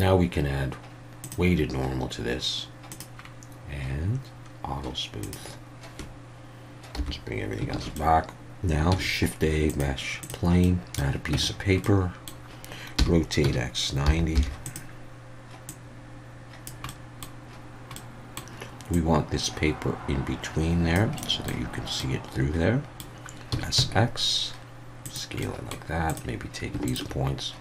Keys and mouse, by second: 2.9 drag, 5.2 click, 7.0 /, 7.7 alt+a, 8.0 click, 9.0 shift+a, 10.7 middle click, 11.3 Tab, 11.8-12.3 middle drag, 13.0 r, 13.4 x, 14.0 9, 14.3 0, 14.7 click, 15.7-16.7 drag, 16.9 middle click, 18.0 middle click, 18.9-21.0 drag, 21.2 middle click, 22.0-23.1 middle drag, 23.5 s, 23.8 x, 25.0 click, 25.5 middle click, 26.1 click.